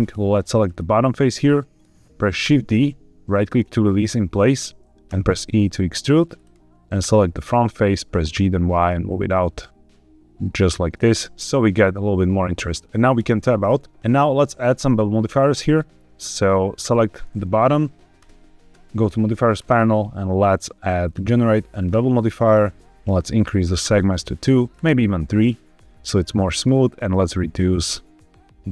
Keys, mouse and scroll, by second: 0.5 click, 1.3 middle click, 2.3 shift+d, 3.2 right click, 5.0 e, 6.2 click, 6.8 click, 7.3 middle click, 8.0 g, 8.2 y, 10.5-12.8 drag, 13.1 Tab, 14.0 shift+middle click, 14.0-14.4 scroll down 2, 14.0 shift+s, 16.6 click, 18.1 click, 19.5-21.8 drag, 23.6 click, 24.6 click, 25.2 scroll up 1, 26.5-28.7 shift+drag.